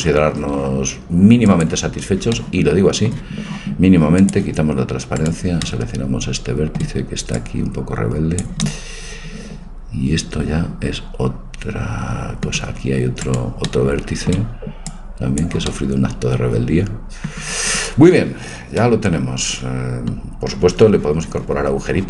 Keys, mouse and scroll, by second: 1.5-2.5 drag, 2.4-3.6 middle drag, 4.2-5.2 drag, 5.2 right click, 5.7 middle click, 6.3 right click, 7.4-9.2 drag, 8.6-10.4 middle drag, 13.2-15.1 right drag, 13.7-15.1 middle drag, 14.9-16.9 drag, 19.1 middle click.